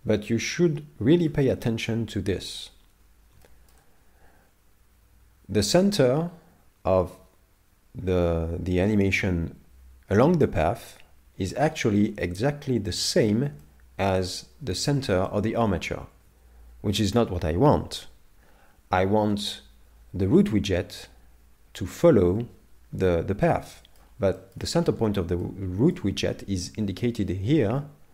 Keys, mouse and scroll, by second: 0.2 scroll down 1, 1.3 z, 3.4 shift+middle click, 12.1 ctrl+Tab, 13.6 middle click, 16.2 ctrl+Tab, 17.7 KP_7, 23.5 middle click, 24.4 shift+middle click, 24.8-25.4 scroll up 3, 25.4 middle click, 25.4 scroll up 1.